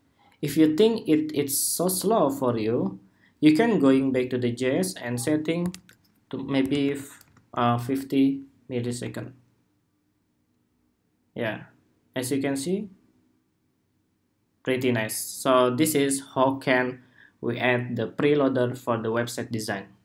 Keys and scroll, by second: 7.0 super+s, 7.6 super+Tab, 8.7 super+r.